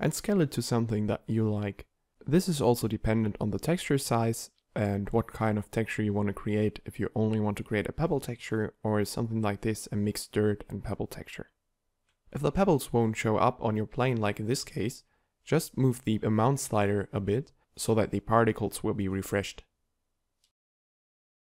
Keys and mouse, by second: 4.7-6.6 middle drag, 13.0 click, 17.3-19.1 middle drag.